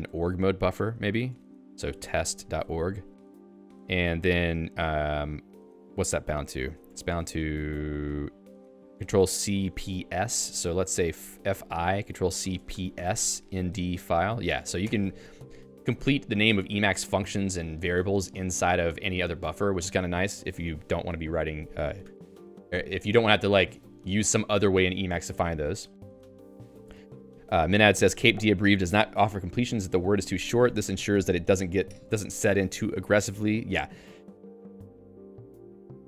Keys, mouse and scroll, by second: 0.3 ctrl+f, 1.8-4.0 typing, 5.0 Return, 6.7 ctrl+s, 7.0 ctrl+alt+j, 7.2 Return, 9.4 ctrl+alt+j, 9.7 Return, 10.3 i, 10.8 Return, 11.1 f, 11.5 i, 13.3-14.7 typing, 14.8 Return, 15.3 Escape, 15.9 d, 16.4 k, 17.2 Escape.